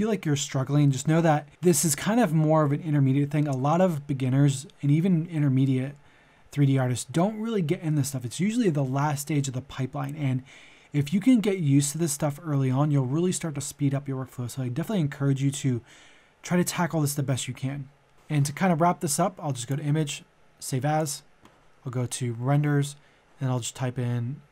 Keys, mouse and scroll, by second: 19.6 click.